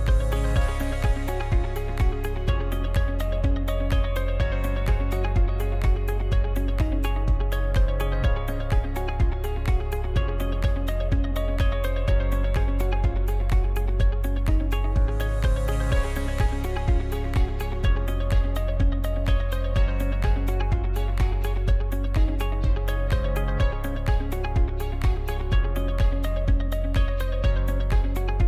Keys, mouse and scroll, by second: 0.7-1.0 scroll up 1, 1.0-2.1 middle drag, 2.1-2.8 scroll up 1, 2.8-3.4 scroll down 1, 3.5 shift+middle click, 3.8-4.2 scroll down 1, 4.2 middle click, 5.1-6.0 scroll up 1, 6.0-7.4 shift+middle drag, 7.4 right click, 8.6-13.0 drag, 13.0 right click, 13.6-15.1 middle drag, 15.1-15.7 scroll down 1, 15.7 right click, 19.9 m, 26.3 right click, 28.1 shift+d.